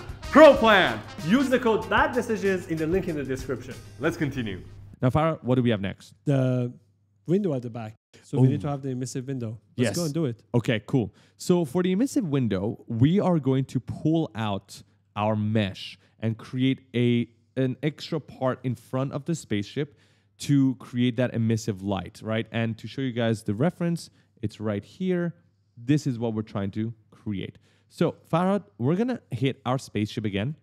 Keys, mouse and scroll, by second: 10.3 right click, 10.3 right click, 11.2 right click, 11.4 right click, 11.5 right click, 11.6 right click, 11.9 right click, 11.9 right click, 12.1 right click, 12.2 right click, 12.3 right click, 12.3-15.2 typing, 13.8 right click, 13.9 right click, 14.2 right click, 14.6 right click, 14.8 right click, 23.3 click, 24.4-24.8 scroll down 1, 24.8 middle click, 25.2 scroll up 1, 25.8 middle click, 26.9 right click, 29.7 click.